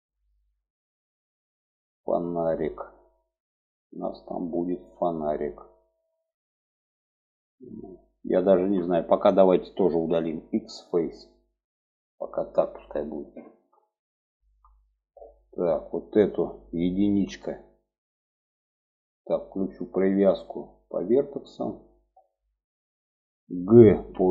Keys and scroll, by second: 9.4 x, 16.4 1, 23.2 g.